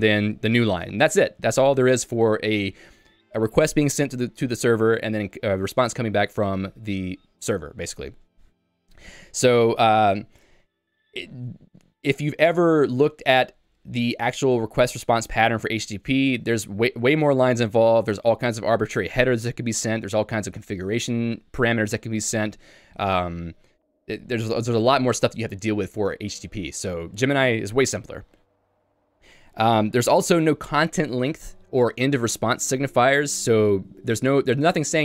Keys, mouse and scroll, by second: 30.3 l.